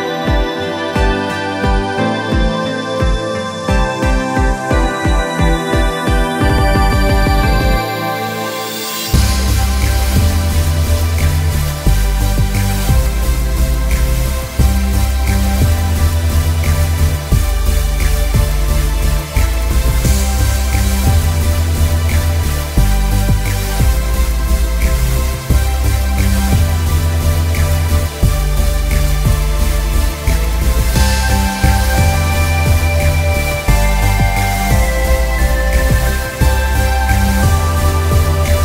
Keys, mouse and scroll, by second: 1.4 click, 12.4 click, 25.8 click, 30.1 click, 31.5 alt+scroll down 3, 32.1 space, 32.3 click, 32.6 space, 34.8 click, 35.0 space.